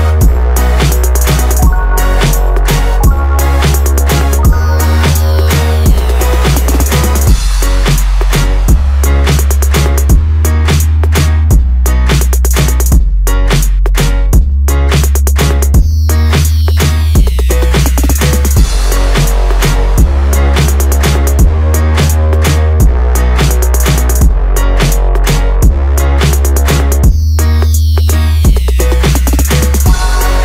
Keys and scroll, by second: 3.0 Return, 8.1 Return, 18.1 Return, 27.6 Return.